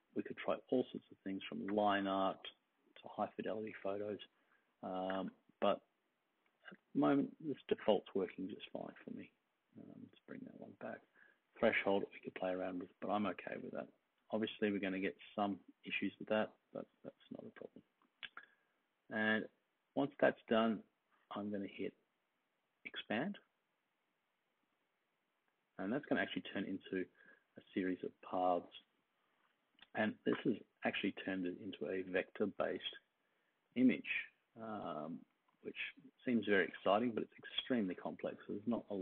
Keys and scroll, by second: 32.4 super+z, 35.3 super+z, 36.6 super+z.